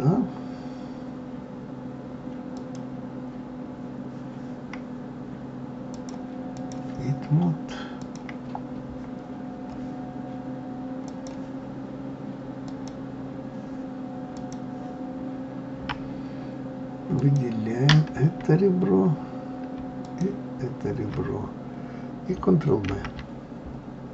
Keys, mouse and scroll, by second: 2.5 click, 5.9-8.1 drag, 11.0 click, 12.6 click, 14.4 click, 17.2 alt+click, 20.0 alt+shift+click, 22.9 ctrl+v.